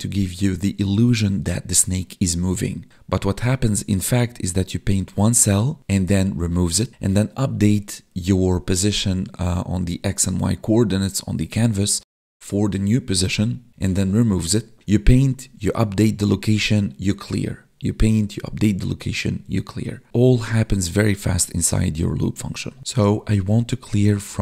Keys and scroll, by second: 12.4 space, 13.3 Down, 16.6 Left, 20.3 Left, 20.6 Down, 20.9 Left, 21.8 Down, 22.3 space.